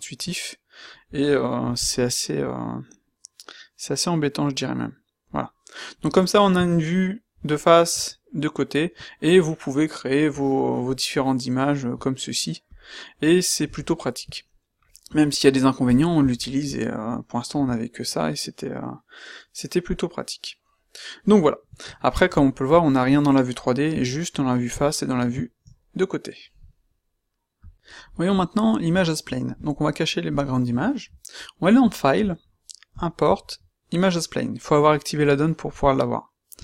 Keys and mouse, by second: 6.5 q, 7.9 q, 21.0-21.8 middle drag, 23.9 q, 24.7 q.